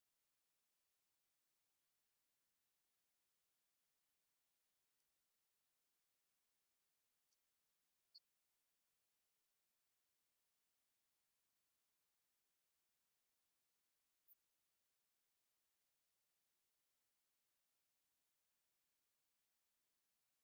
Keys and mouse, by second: 0.2 click, 1.0 click, 2.2-5.1 drag, 6.7-8.6 drag, 9.2 click, 10.6 click, 11.5-13.3 drag, 14.3 click, 16.0 click.